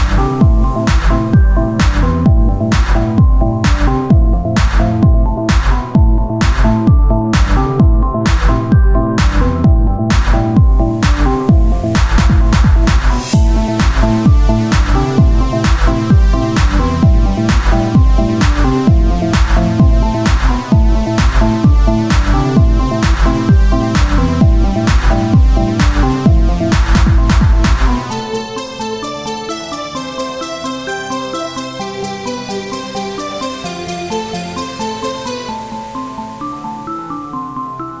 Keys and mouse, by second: 2.7 c, 2.7 r, 4.1-7.3 drag, 7.3 r, 7.7 Tab, 26.0-38.0 drag, 26.0 shift+d.